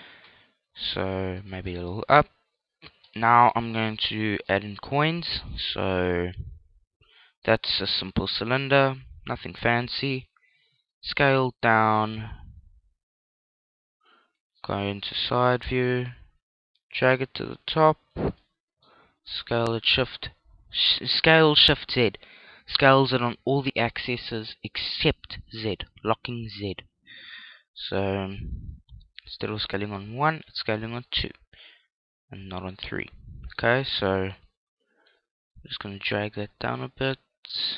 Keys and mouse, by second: 1.2 g, 2.6 click, 4.1 shift+a, 8.8-11.6 drag, 10.7 s, 13.7 click, 14.1 KP_3, 14.8 KP_5, 15.3 click, 15.9 middle click, 16.7-18.6 drag, 18.1 middle click, 18.6-20.4 middle drag, 18.8 s, 27.2 click, 27.4-29.1 middle drag, 28.7 s, 29.7 click, 30.1-32.1 middle drag, 32.7-34.3 middle drag, 34.3 KP_1, 35.3-37.3 middle drag, 36.7 click.